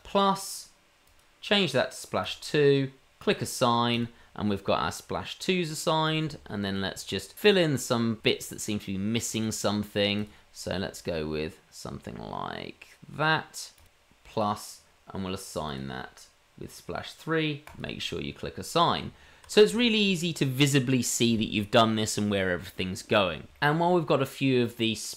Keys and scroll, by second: 19.0 Tab.